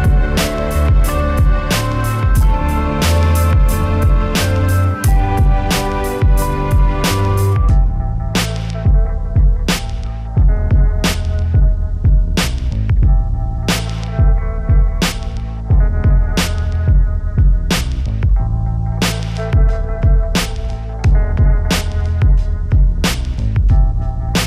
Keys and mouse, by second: 0.9 ctrl+r, 1.6 click, 1.9 ctrl+r, 2.2 ctrl+r, 2.9 click, 3.3 a, 3.3 z, 3.8 b, 4.0 click, 4.8-10.8 typing, 5.7 click, 6.5 click, 7.0 click, 7.7 click, 9.7 click, 10.6 right click, 11.9 right click, 12.1 drag, 12.4 a, 12.9 z, 13.7 KP_1, 15.7 a, 15.8 ctrl+KP_3, 16.0 a, 16.1 a, 16.3 b, 17.6 b, 18.1 ctrl+KP_3, 18.3 KP_1, 19.1 click, 19.1 right click, 19.3 KP_1, 20.8 z, 20.9 z, 21.0 KP_1, 21.1 Tab, 21.5 Tab, 22.4 a, 22.5 z, 23.2 click, 23.6 z, 23.7 Tab, 24.1 Tab, 24.3 click.